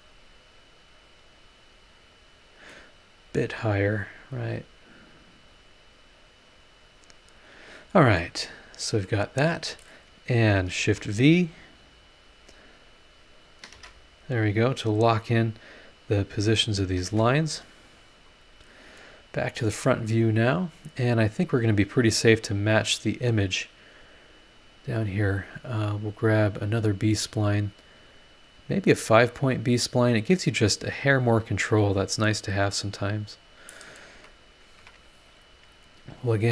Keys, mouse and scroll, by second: 0.8 scroll up 1, 2.7 middle click, 2.8 click, 2.8 right click, 4.3-5.5 drag, 6.5 click, 7.8 scroll down 1, 8.2-9.2 middle drag, 8.2 click, 8.2 right click, 10.4 click, 10.8 shift+v, 11.8 click, 12.3 click, 13.3 click, 13.7 shift+v, 14.7 click, 15.0 middle click, 16.5 click, 17.0 shift+v, 17.8 click, 18.3 click, 19.1 click, 19.8 scroll up 1, 26.6 click, 28.5 click, 29.4 click, 30.3 click, 31.1 click, 33.4 click, 34.1 Escape, 34.8 Escape, 35.6 click.